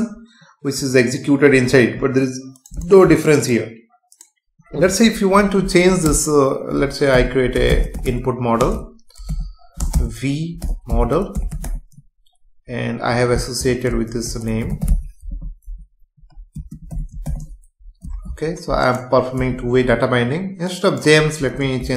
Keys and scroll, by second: 6.1 Return, 8.6 space, 9.8 BackSpace, 16.5 space, 18.0 ctrl+s, 19.4 F5.